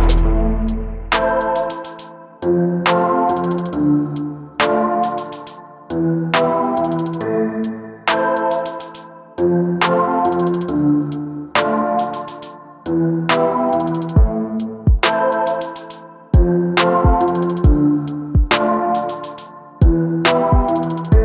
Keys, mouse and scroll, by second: 1.8 click, 2.0 click, 2.6 shift+d, 3.8 right click, 6.9 click, 7.4 g, 9.1 space, 11.5 space, 11.8 click, 13.0 click, 13.0-13.4 scroll down 11, 13.4-14.3 scroll up 5, 14.3 click, 14.5-15.2 scroll down 3, 15.2 click, 16.1 space, 19.0 right click, 21.0 space.